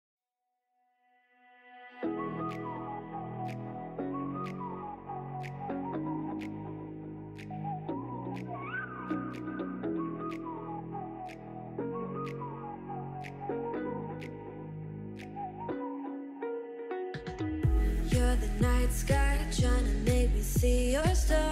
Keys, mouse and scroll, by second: 0.0 scroll up 2, 0.3-1.3 scroll down 6, 0.5 middle click, 0.9 click, 1.3-2.6 middle drag, 2.6 scroll up 4, 2.8 scroll down 3, 2.9-4.5 middle drag, 4.5 KP_3, 4.9 shift+middle click, 5.2 alt+z, 5.5 shift+middle click, 5.7-6.1 scroll up 3, 6.1 middle click, 6.7 Tab, 7.0 click, 7.5 Tab, 8.4 KP_3, 8.8-9.7 scroll up 4, 9.0 shift+middle click, 10.2 e, 11.0 s, 11.7 1, 12.3 s, 13.3 scroll down 3, 13.5 e, 14.6 s, 16.1 s, 17.0 e, 18.3 s, 20.2 e, 21.1 s.